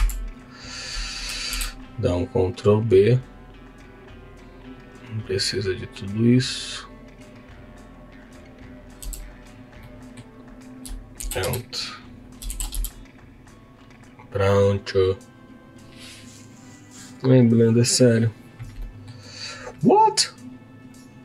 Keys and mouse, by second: 1.5 ctrl+b, 9.5 Tab, 9.7 middle click, 11.2 shift+d, 11.4 x, 12.2 click, 12.5 shift+d, 12.7 x, 18.8 middle click, 21.0 click.